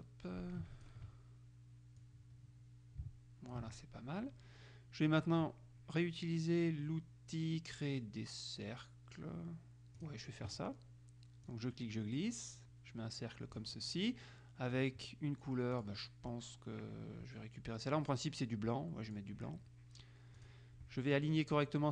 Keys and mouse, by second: 2.2-4.2 drag, 10.2 click, 11.6-14.2 drag, 15.9 click, 19.2 click, 20.5 click.